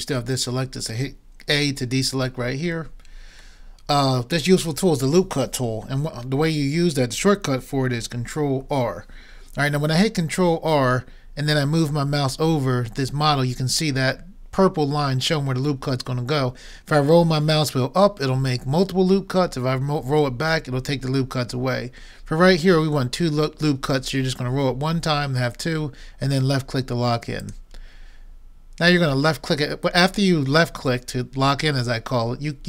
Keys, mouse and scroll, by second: 0.1-1.8 middle drag, 2.7 a, 8.6 ctrl+r.